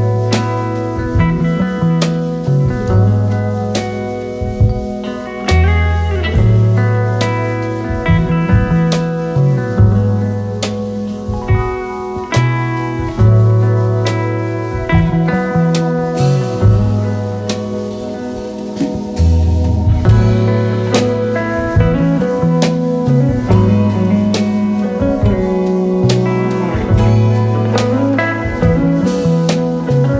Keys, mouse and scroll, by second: 0.4-1.2 typing, 2.2-3.0 typing, 2.7 click, 26.6-27.1 drag.